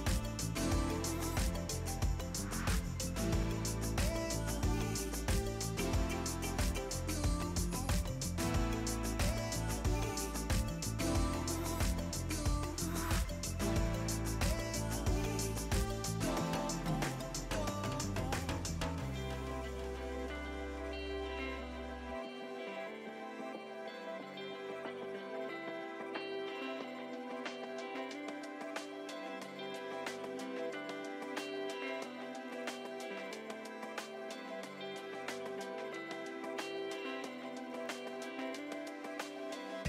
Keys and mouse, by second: 0.2 click, 0.6 right click, 0.9 click, 1.8 click, 2.4 shift+click, 2.7 click, 3.9 Escape, 4.0 click, 4.3 Escape, 4.4 click, 4.9 a, 5.1 click, 7.7 Escape, 8.1 click, 8.6 right click, 10.0 click, 11.3-12.4 typing, 12.9 click, 13.3 ctrl+shift+x, 14.7 click, 15.8 click, 16.2 click, 18.6 ctrl+e, 18.7 click, 19.1 a, 19.3 click, 22.4 click, 25.1 Delete, 29.9 click, 30.3 Delete, 32.3 click, 33.4 click.